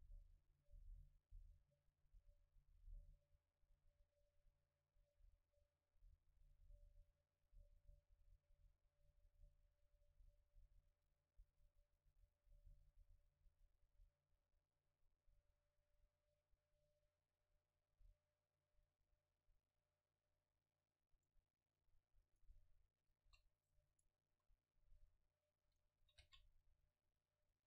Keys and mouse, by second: 21.3-22.3 middle drag, 22.3 right click, 23.3 KP_0, 24.3 Tab, 25.7 a, 26.3 v, 26.8 c.